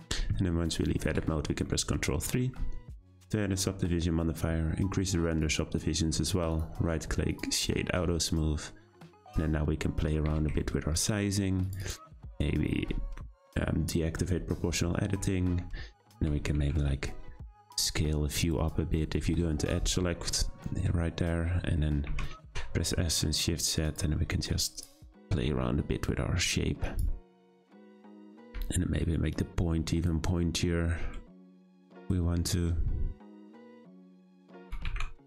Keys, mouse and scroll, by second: 0.0 Tab, 1.0 ctrl+3, 1.7-4.8 middle drag, 5.3-6.5 drag, 6.5-7.8 right drag, 7.8-8.3 scroll down 3, 8.3-9.2 middle drag, 9.2 Tab, 10.0-10.3 scroll up 3, 10.3 2, 10.6-11.6 shift+middle drag, 11.6 click, 11.8 click, 14.4 o, 16.2 s, 18.4 click, 18.6 click, 22.1 s, 24.7 click, 24.9 click, 25.2 s, 27.5 middle click, 28.1-28.4 scroll up 3, 28.4 3, 29.3 click, 31.4 shift+middle click, 32.1-33.4 scroll up 2, 33.4 click, 34.3 scroll down 2, 34.6 s.